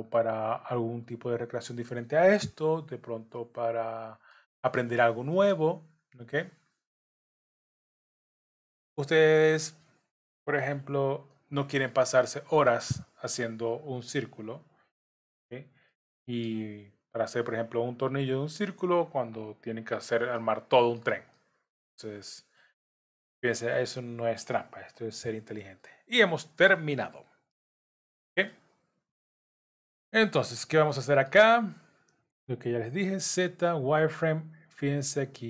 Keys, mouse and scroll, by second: 0.5 click, 1.5 shift+click, 2.9 j, 3.4 middle click, 4.9 click, 5.3 middle click, 6.7 click, 7.1 middle click, 8.3-8.7 scroll up 2, 9.4 scroll up 1, 9.5 shift+click, 10.7 j, 11.3 middle click, 12.2 shift+middle click, 13.6 click, 14.4 shift+click, 15.4 j, 15.9 middle click, 17.4 click, 18.6 shift+click, 19.6 j, 20.4 middle click, 21.3 shift+middle click, 22.8 click, 23.7 shift+click, 24.9 j, 25.3-25.8 scroll down 5, 25.8 middle click, 27.4 KP_7, 28.5 shift+middle click, 29.5-29.9 scroll up 2, 29.9 scroll down 3, 30.9 shift+middle click, 33.0 z.